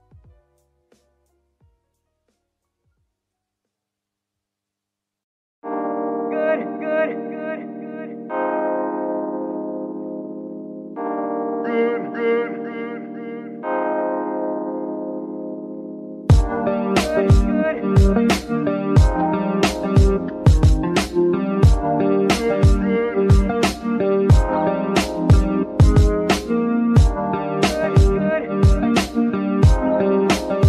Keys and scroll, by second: 1.6 g, 1.8 y, 4.0 g, 4.2 y.